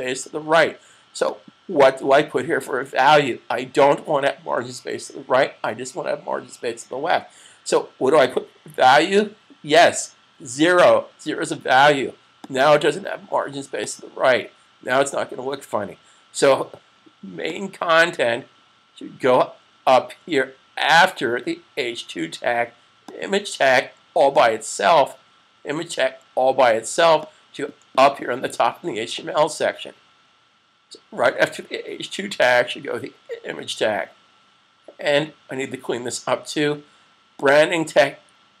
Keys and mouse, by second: 1.1 click, 10.4 0, 12.6 click, 17.8 click, 23.0 click, 27.1 click, 37.3 click.